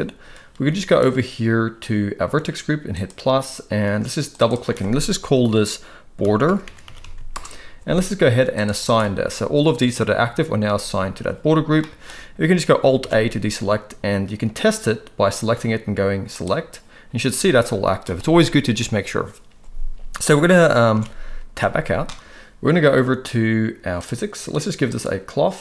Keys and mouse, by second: 2.9 click, 4.4-7.3 drag, 8.5 click, 8.8 click, 11.7 middle click, 13.0 alt+a, 16.3 click, 20.9 alt+a, 21.5 Tab, 23.9 click, 24.9 click.